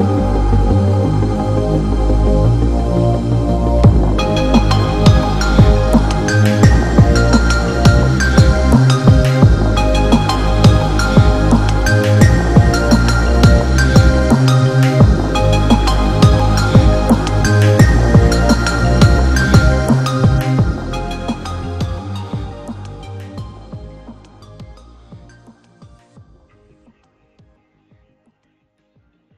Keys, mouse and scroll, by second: 0.9-2.1 drag, 13.0 click, 13.8-14.6 alt+shift+drag, 17.5-18.5 drag, 20.1 Right, 23.0 click, 26.0 ctrl+-, 26.5 space, 26.8 click, 26.9-27.3 space.